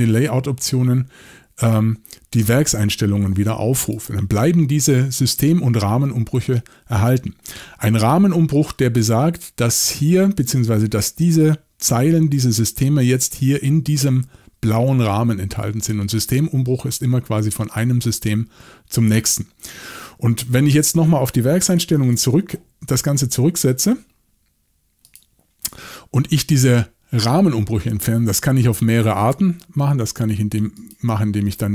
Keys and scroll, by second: 22.0 shift+super+l.